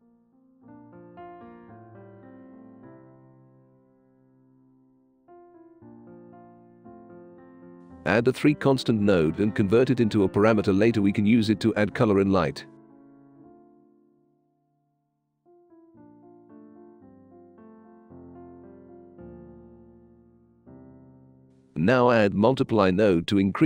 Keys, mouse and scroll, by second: 0.5 click, 1.5 click, 4.5 click, 7.1-7.8 right drag, 9.2 3, 9.5 click, 10.3 click, 11.8 right click, 12.3 right click, 12.9 click, 15.4 shift+c, 16.3 r, 18.5-19.2 drag, 20.7 click, 23.5 2.